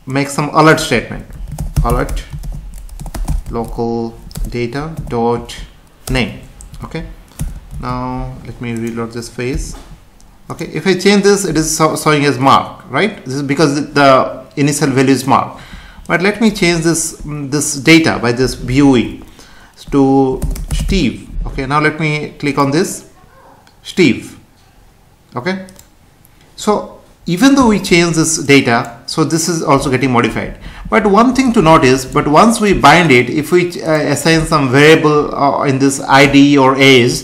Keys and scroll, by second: 4.3 Return, 6.7 Right, 7.7 ctrl+s, 9.5 F5.